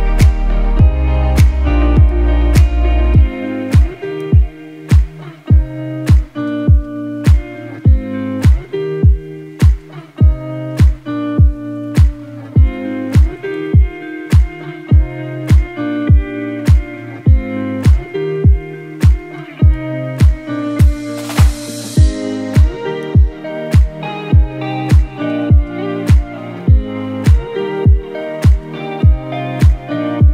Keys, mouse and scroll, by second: 0.0 Down, 0.7 Down, 3.7 Up, 9.1-11.1 drag, 11.2 click, 11.9-12.8 typing, 12.4 click, 13.0 click, 15.8 right click, 16.7 click, 17.7 space, 17.9 click, 18.3 space, 19.2-20.9 alt+shift+drag, 21.2 space, 21.4 space, 21.8 click, 23.2-25.7 typing, 23.3 click, 25.5 click, 25.9 click.